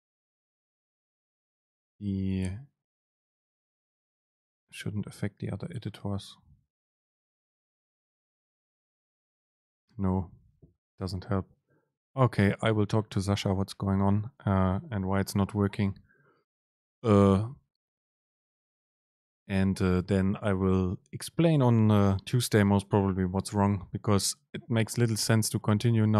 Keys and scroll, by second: 0.8 Down, 1.8 Up, 2.5 BackSpace, 4.3 ctrl+shift+super+F9.